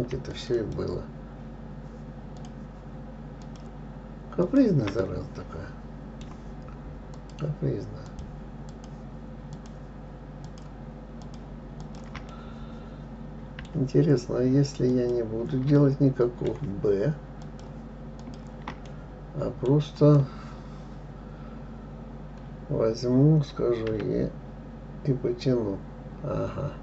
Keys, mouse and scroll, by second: 0.0 click, 0.7 shift+click, 1.0 shift+click, 2.8 shift+click, 3.8 shift+click, 4.8 shift+click, 5.4-7.5 middle drag, 7.5 shift+click, 8.5 shift+click, 9.1 shift+click, 9.9 shift+click, 10.8 shift+click, 11.6 shift+click, 12.2 shift+click, 12.7-15.3 middle drag, 15.3 shift+click, 16.2-17.8 middle drag, 17.8 shift+click, 18.6 shift+click, 19.2-22.2 middle drag, 24.3 e.